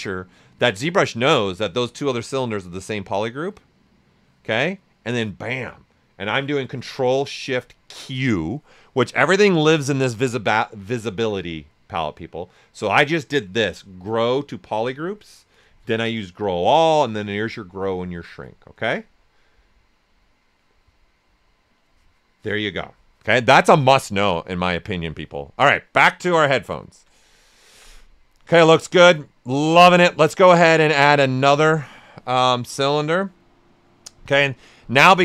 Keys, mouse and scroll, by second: 8.7-23.7 drag, 23.7 click, 25.4 right click, 26.0 ctrl+right click, 27.7 shift+f, 28.0 right click, 28.7 s, 29.1 right click, 31.5-35.2 drag.